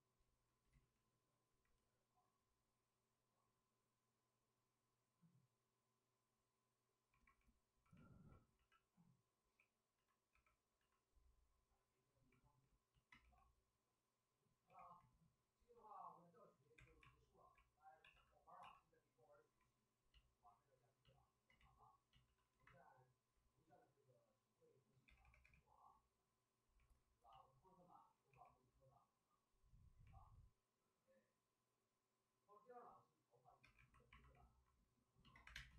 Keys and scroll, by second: 0.7 ctrl+z, 9.2-11.2 typing, 13.1 w, 14.6 2, 16.7 2, 17.0 alt+s, 17.3 alt+s, 17.9 c, 20.8-21.5 typing, 23.6 shift+f, 23.8 shift+f, 25.0 2, 25.2 2, 25.4 2, 28.0-28.7 typing, 33.6 2, 35.4 2, 35.5 space.